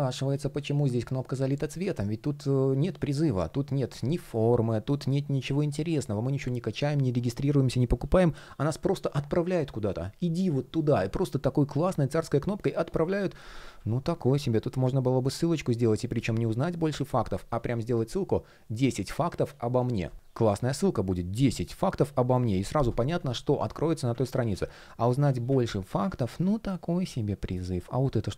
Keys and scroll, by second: 13.3 super+z, 23.9 super+z, 25.2 super+z, 27.7 shift+p.